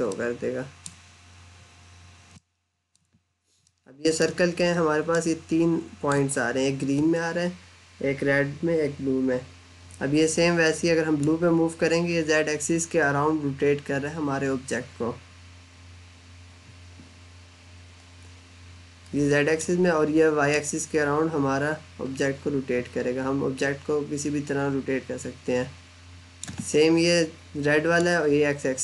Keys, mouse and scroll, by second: 0.0 middle click, 2.2 middle click, 3.1-3.4 scroll up 1, 3.5 alt+middle click, 5.0 alt+middle click, 11.0 click, 28.0 click.